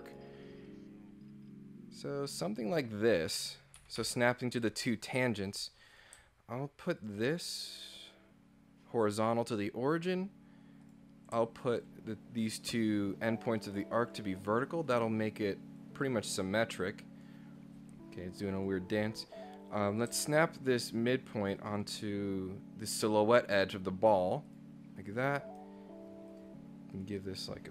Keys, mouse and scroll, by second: 0.1 click, 2.6 click, 3.8 Escape, 4.0 Escape, 5.9 click, 7.0 ctrl+click, 7.9 click, 10.8 click, 11.7 ctrl+click, 14.0 click, 14.9 click, 15.8-17.3 drag, 18.6 click, 19.7 click, 21.6 ctrl+click, 24.5 click, 25.0 click, 25.4 right click, 26.3 click, 27.0 click.